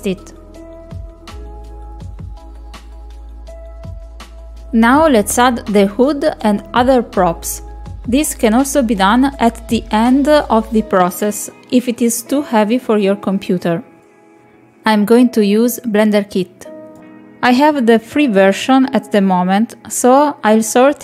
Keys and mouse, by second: 0.2 click, 0.3 click, 0.4 click, 1.0 click, 1.1 click, 1.4 middle click, 2.8 click, 3.0 click, 3.1 click, 4.2 click, 4.4 click, 13.7 click.